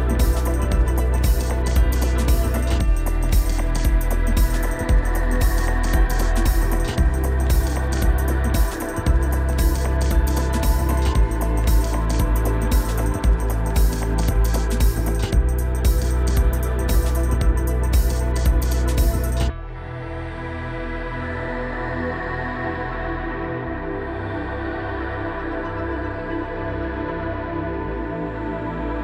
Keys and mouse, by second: 0.0 ctrl+z, 0.0 ], 1.1 ctrl+z, 1.1 [, 1.7 ctrl+z, 1.7 [, 2.6 ctrl+z, 2.6 ], 3.6 [, 7.2 ctrl+z, 8.0-9.6 typing, 9.0 ctrl+z, 9.0 ctrl+z, 9.6 ctrl+z, 15.6 ], 16.9 ctrl+], 17.0 ctrl+z, 19.4 ctrl+z, 22.2 ctrl+z, 24.0 ctrl+z, 24.0 click, 24.3 [, 24.8 ctrl+z, 24.8 click, 24.8 [, 26.2-29.0 drag, 28.5 [.